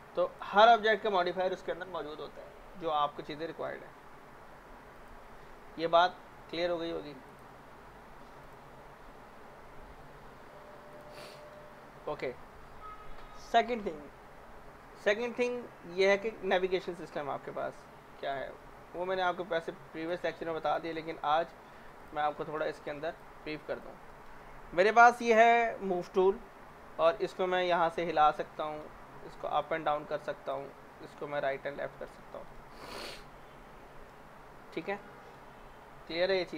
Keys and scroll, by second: 3.6 Delete, 11.6 z, 21.2 w, 30.7 ctrl+z, 32.2 ctrl+z.